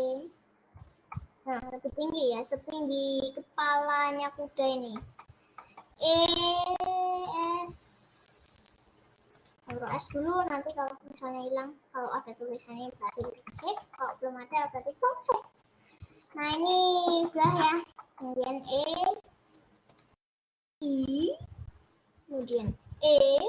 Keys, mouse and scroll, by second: 1.5-6.1 middle drag, 6.1 e, 7.6 s, 13.3-14.6 shift+middle drag, 14.6 s, 16.8-18.8 middle drag, 18.8 e, 20.6 middle click, 23.0 e.